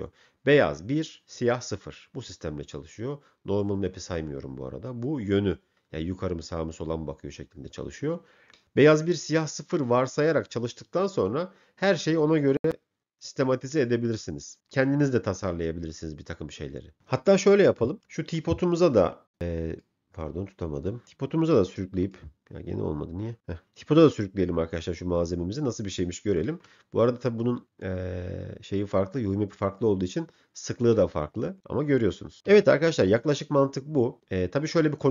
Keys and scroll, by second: 32.7 m.